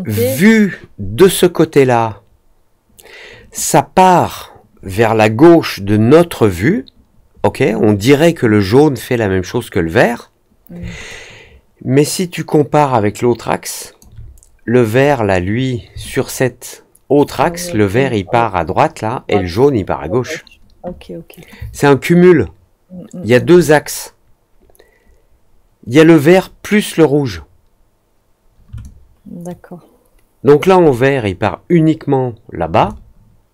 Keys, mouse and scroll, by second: 11.0-13.9 alt+drag, 16.0-17.2 alt+drag, 21.6-23.3 alt+drag, 28.7-30.5 alt+drag, 32.8-33.5 alt+drag.